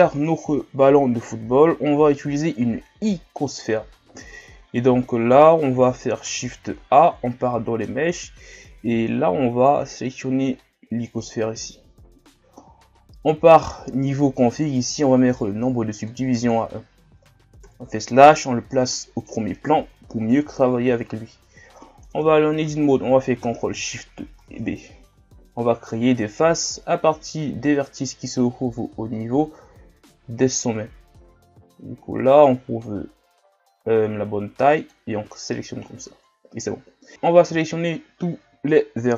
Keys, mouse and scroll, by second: 6.2 shift+a, 16.0-17.6 drag, 17.6 KP_Divide, 22.1 Tab, 24.4 ctrl+shift+b, 37.1 a, 37.4 a.